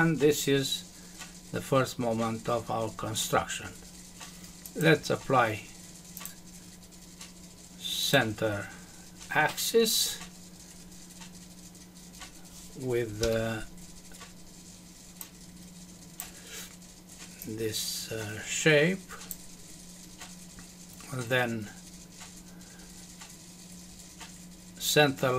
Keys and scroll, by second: 13.2 Escape.